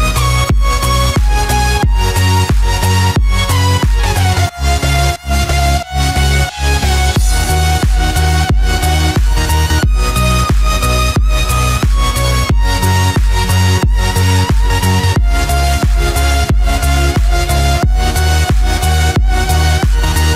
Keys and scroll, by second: 3.3 ctrl+-, 4.0 ctrl+0, 14.1 ctrl+=, 14.5 ctrl+space, 15.0 ctrl+=.